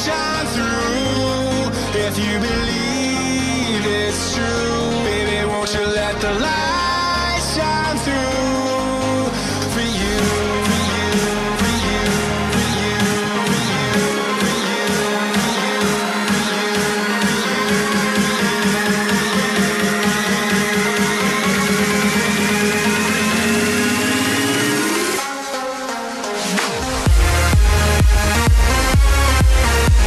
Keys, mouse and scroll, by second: 1.5 z, 3.0-3.6 scroll down 2, 3.6-3.9 scroll up 3, 3.9-5.1 scroll down 5, 5.1-6.7 middle drag, 5.1-6.6 scroll up 1, 6.6-7.4 scroll up 2, 7.4-8.8 scroll up 1, 8.8 z, 10.2-13.8 drag, 14.6 middle click, 15.5-18.3 drag, 18.3-19.7 middle drag, 19.7 ctrl+KP_Add, 20.1 ctrl+KP_Add, 22.5 KP_1, 25.7 r, 28.5 g.